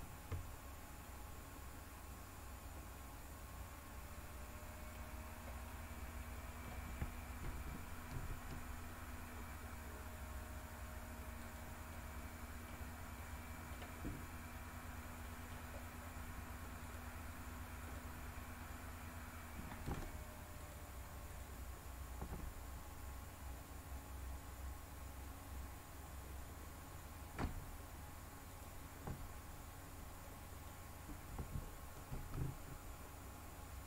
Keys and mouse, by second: 1.0-4.9 middle drag, 5.6-6.6 middle drag, 8.1 g, 11.3 click, 12.0 middle click, 13.2 middle click, 15.2 middle click, 17.7 click, 20.6 shift+click, 28.5 shift+click, 30.2 middle click, 32.0 g.